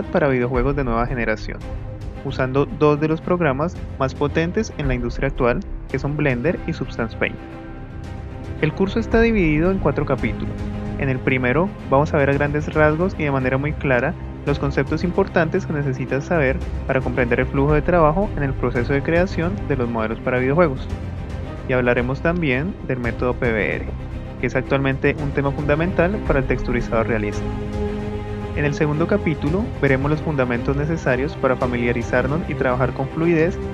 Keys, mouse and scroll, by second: 0.5-0.9 middle drag, 1.3 middle drag, 31.9 KP_1.